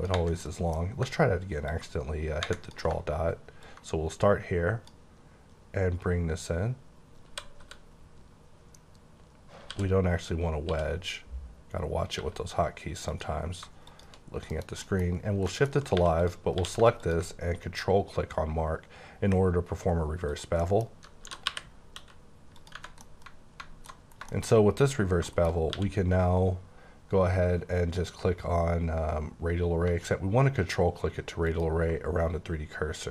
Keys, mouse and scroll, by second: 0.4 middle click, 0.8 scroll up 1, 1.7 ctrl+click, 3.6 ctrl+click, 7.3 typing, 9.7-10.7 typing, 11.9-12.7 typing, 13.1 click, 13.9 click, 14.5 KP_Decimal, 14.8 middle click, 15.0 scroll down 3, 15.3 Tab, 15.5 middle click, 15.9 3, 16.2 click, 16.5 q, 16.9 click, 20.3 click, 20.6 middle click, 21.2-22.0 typing, 22.6 click, 22.7 Left, 22.9 scroll down 1, 23.0 middle click, 24.0-24.6 scroll down 4, 24.3 shift+middle click, 25.3 shift+middle click, 25.5 shift+scroll down 2, 25.7 q, 31.5 ctrl+click, 32.4-33.1 scroll down 3.